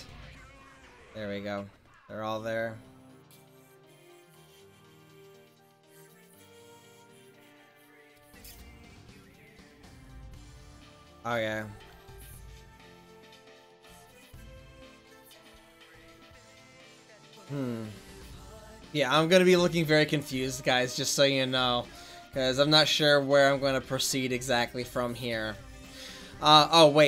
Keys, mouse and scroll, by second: 3.5 ctrl+s, 11.7 ctrl+s, 15.7-17.5 middle drag, 26.6 right click.